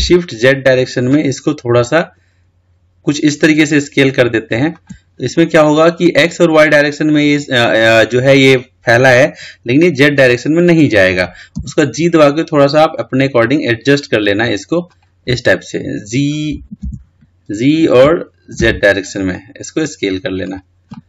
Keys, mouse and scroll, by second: 5.6-8.7 middle drag, 12.1 g, 17.0 ctrl+z, 18.3 g.